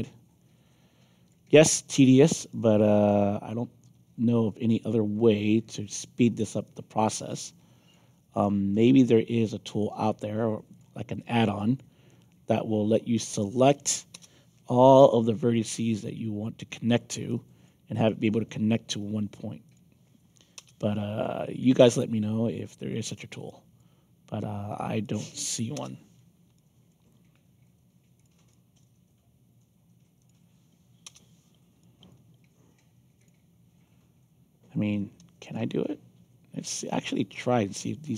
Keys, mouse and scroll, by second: 1.6 alt+middle click, 2.4 alt+click, 3.4 alt+middle click, 4.6 alt+click, 5.7 middle click, 6.6-7.9 alt+drag, 10.7 click, 11.1 alt+click, 13.1 click, 14.1 Return, 14.9 alt+click, 16.8 click, 17.2 alt+click, 18.0 alt+click, 19.6 click, 20.5 Return, 21.4 alt+click, 23.0 click, 23.4 alt+click, 25.0 click, 25.7 Return, 26.5 alt+click, 28.1 click, 28.5 alt+click, 30.1 click, 31.0 Return, 31.8 alt+click, 33.1 click, 35.4 shift+click.